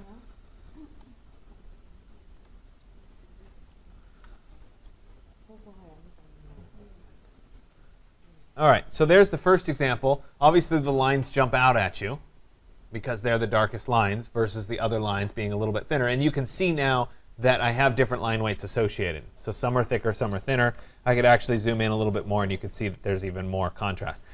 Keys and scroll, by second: 21.1 ctrl+=.